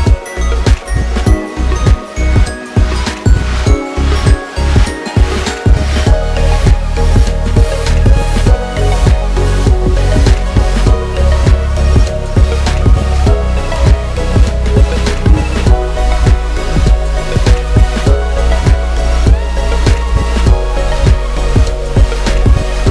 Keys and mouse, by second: 7.6 i, 11.7 ctrl+f, 15.4 click, 16.8-19.4 shift+drag, 20.1-20.8 drag, 20.8-22.9 middle drag.